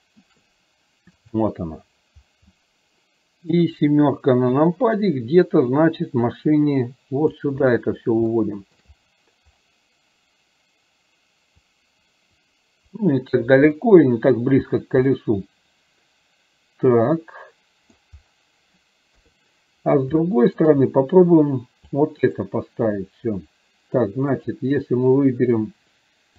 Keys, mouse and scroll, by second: 1.3 click, 2.7-3.5 middle drag, 6.4-7.4 drag, 8.4 shift+middle click, 11.8-13.4 drag, 13.9-14.5 middle drag, 14.4 scroll down 1, 15.2-18.0 middle drag, 17.9 scroll down 1, 20.2-20.7 shift+middle drag, 22.0 click.